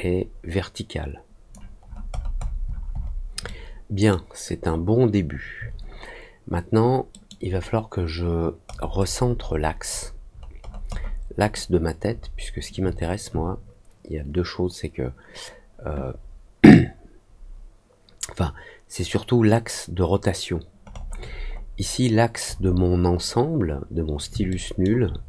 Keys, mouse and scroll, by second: 1.7-3.1 alt+scroll down 5, 3.4 alt+middle click, 4.4 alt+scroll down 1, 5.0 alt+scroll down 1, 7.0 middle click, 8.6-9.5 scroll down 3, 10.2-11.0 scroll down 3, 11.3 middle click, 12.1 scroll down 1, 20.8-21.6 scroll up 3, 22.4 scroll down 1, 24.4 alt+middle click.